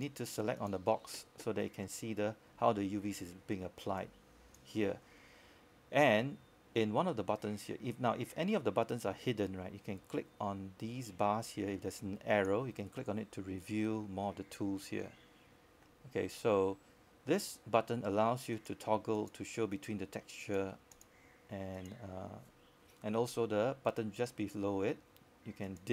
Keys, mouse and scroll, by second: 4.3 click, 13.2-14.2 scroll down 1, 14.2 click, 16.3-17.9 scroll down 1, 18.5 click, 23.3-25.9 drag.